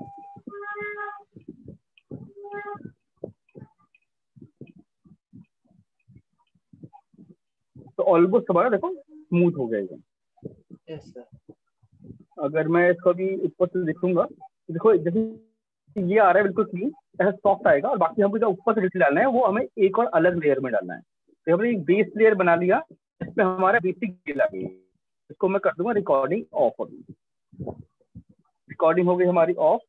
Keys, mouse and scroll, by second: 0.7 click, 1.7 alt+click, 2.9 alt+click, 3.7 click, 5.3 click, 5.7 alt+click, 5.8 alt+click, 6.7 click, 7.7 right click, 9.7 alt+click, 10.9 alt+click, 11.8 right click, 12.8 alt+click, 14.1 shift+click, 14.8 right click, 18.7 right click, 19.9 right click, 21.7 shift+click, 24.7 alt+click, 25.7 click.